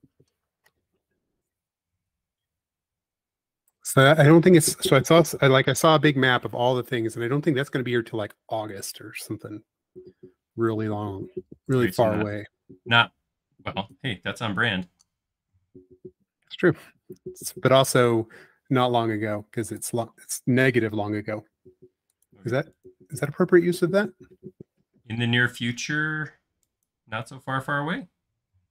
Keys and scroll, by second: 0.3 q, 3.0 Up, 9.3 space, 14.9 q, 18.1 Right, 27.9 q.